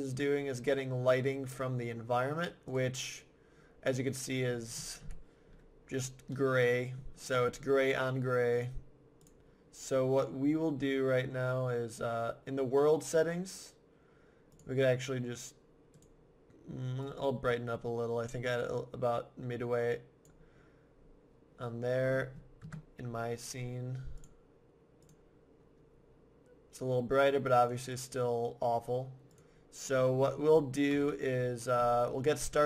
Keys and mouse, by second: 2.7-4.3 drag, 4.5-6.1 middle drag, 5.0 KP_1, 8.1 middle click, 8.7-10.6 drag, 14.5-17.7 drag, 22.0 middle click, 22.6 KP_0, 22.7-23.9 middle drag, 27.6-29.5 middle drag, 30.9 KP_1.